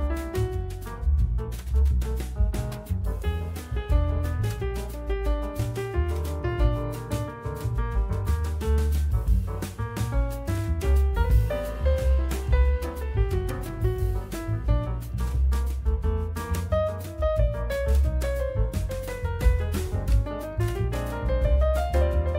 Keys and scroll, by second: 0.7 F3, 7.4 F4, 8.9 F4, 10.5 z, 10.8 F4, 13.4 F4, 14.9 F3, 15.1 2, 15.8 F3.